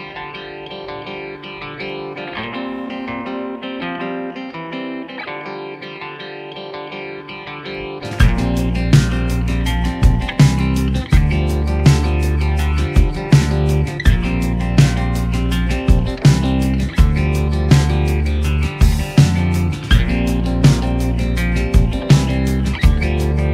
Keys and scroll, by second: 11.7 ctrl+z, 14.2 ctrl+z, 17.3 a, 18.8 u, 19.7 a, 22.6 a, 22.9 g.